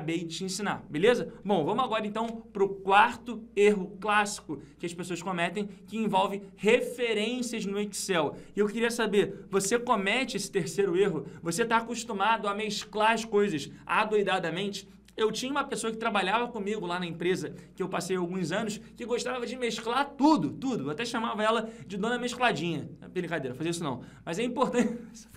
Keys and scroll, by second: 2.4 ctrl+Page_Down, 9.8 ctrl+Page_Up.